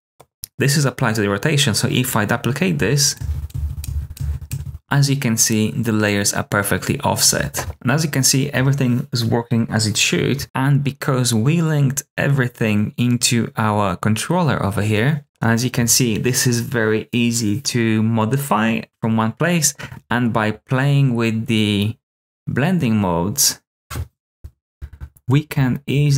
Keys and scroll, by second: 3.1 super+d, 3.4 super+d, 3.8 super+d, 4.1 super+d, 15.2 Return, 24.4-26.1 typing.